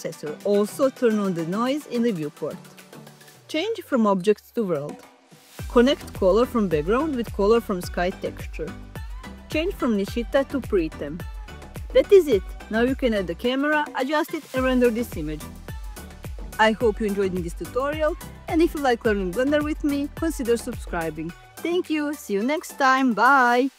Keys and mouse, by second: 5.2-6.3 drag, 7.3 middle click, 8.8 click, 10.5 click, 11.4-12.2 drag.